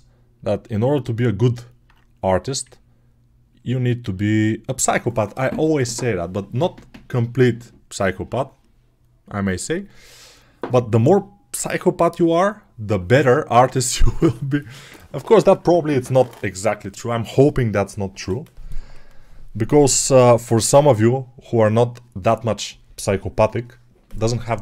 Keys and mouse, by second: 1.7-24.6 drag.